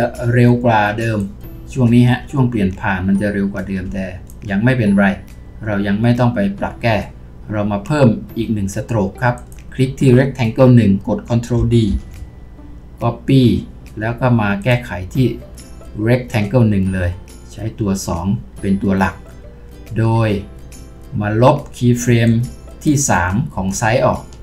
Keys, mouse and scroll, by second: 2.1 scroll, 11.9 ctrl+d.